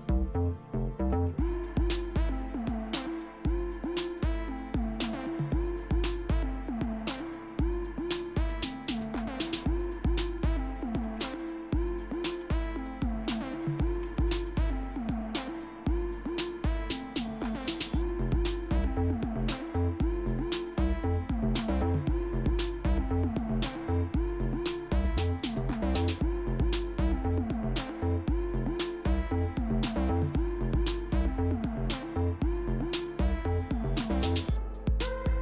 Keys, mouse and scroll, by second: 1.0-2.3 typing, 2.5 Return, 4.8 click, 9.7 click, 10.8-15.0 typing, 17.5 click, 21.4-22.2 scroll down 1, 22.2-23.0 scroll down 1, 23.0-23.8 scroll down 1, 23.8-24.6 scroll down 1, 24.6 scroll down 1, 27.1 click, 29.5-32.2 drag, 34.8-35.4 drag.